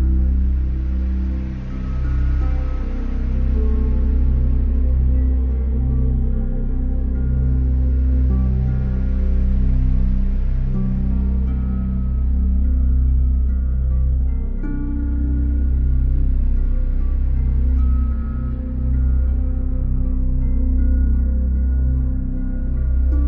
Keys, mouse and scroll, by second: 1.4 middle click, 3.1 alt+click, 4.2 click, 5.7 alt+click, 6.9 middle click, 8.1 alt+click, 9.9 Delete, 12.2 click, 13.6 middle click, 13.9 middle click, 15.4 click, 16.0 middle click, 16.3 middle click, 16.6 middle click, 17.6 click, 17.6-18.5 scroll, 20.1 middle click, 21.3 click, 22.9 alt+click.